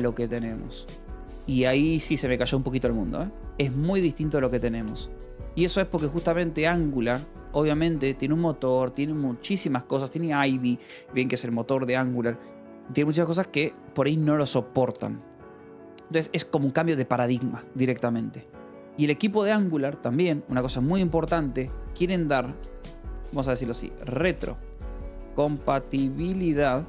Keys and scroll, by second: 0.0-2.2 typing, 0.9 Escape, 3.0 Escape, 4.5 a, 5.3 Escape, 16.0 Escape, 18.7 o, 19.0 :, 19.1 space, 21.9 o, 22.1 p, 22.4 BackSpace, 23.5-26.8 typing.